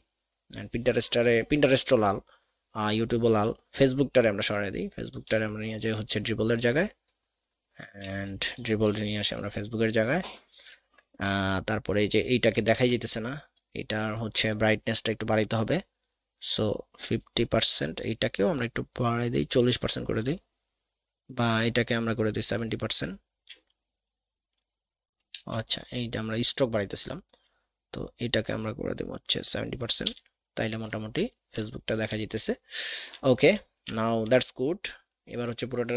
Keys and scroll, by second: 12.7 alt+a, 25.3 x, 30.2 v.